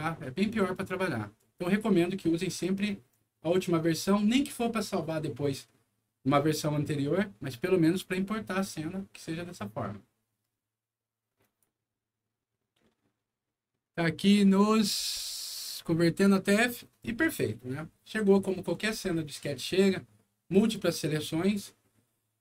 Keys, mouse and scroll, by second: 11.4 click.